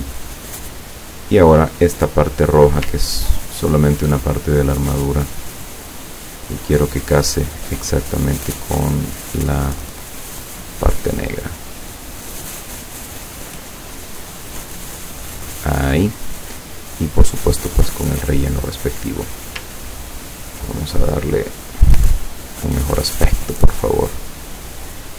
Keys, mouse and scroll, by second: 1.2 click, 3.2-3.8 ctrl+scroll up 4, 6.5 click, 8.7 click, 10.3 click, 11.4-12.2 drag, 13.0 click, 14.2 click, 15.2 click, 17.0 click, 17.4 click, 19.2 click, 21.5 click, 22.4 click, 23.7 click, 24.7 click.